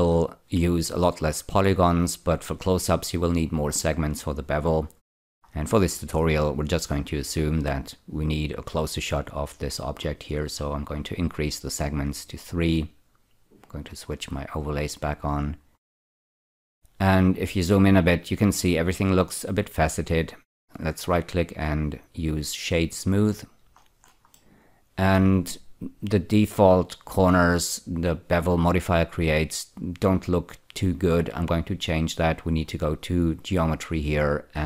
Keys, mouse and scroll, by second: 5.2-7.0 scroll up 8, 11.9 click, 12.4 click, 14.3 click, 15.6-17.0 scroll up 10, 17.5-20.0 middle drag, 20.5 right click, 22.6 click, 24.4 middle click, 33.4 click.